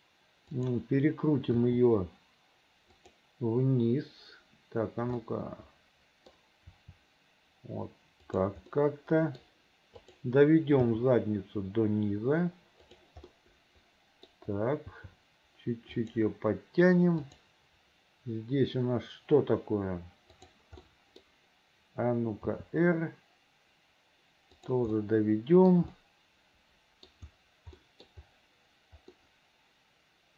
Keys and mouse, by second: 0.7 middle click, 1.7 r, 5.5-6.5 middle drag, 8.4 r, 8.8 middle click, 10.2 middle click, 10.9 g, 13.5 middle click, 15.1 g, 17.4 click, 21.0 click, 22.6 r, 25.1 click, 26.2 click, 28.0 middle click, 29.3-30.3 middle drag.